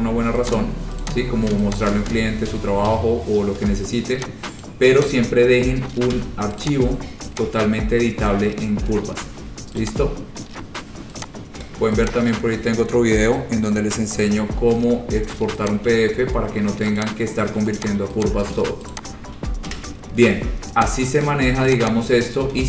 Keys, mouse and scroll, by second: 0.7 click, 1.2 click, 2.0 click, 4.8 shift+click, 5.0 shift+click, 5.2 click, 5.3 shift+click, 5.3 c, 6.3 c, 6.8 click, 8.4 click, 8.8-9.8 scroll, 10.0 click, 10.6 scroll, 11.0 scroll down 10, 11.1 scroll down 1, 11.4 click, 12.3 click, 12.8 scroll, 15.9 shift+click, 16.0 shift+click, 16.2-16.7 scroll, 17.2 click, 17.3-17.8 scroll down 3, 18.0 click, 18.4 click, 18.8 shift+click, 19.1 shift+click, 19.9 Delete, 20.1 scroll down 3, 20.4 scroll, 21.0 click, 21.8 click, 22.0 click, 22.3 scroll down 5, 22.3 scroll down 1.